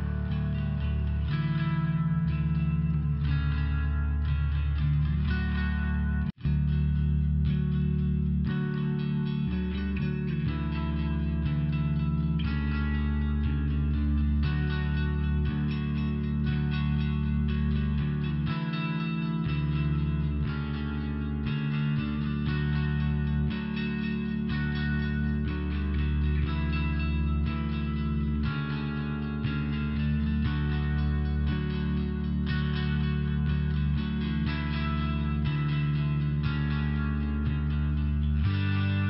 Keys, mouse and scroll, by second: 1.7 click, 9.1 click, 12.5 click, 14.3 click, 19.7 click, 20.0 click, 20.1 click, 22.5 click, 22.9 click, 25.8 click, 30.7 click, 31.6 click, 32.7 click, 32.9 click, 34.7 click, 35.2 click.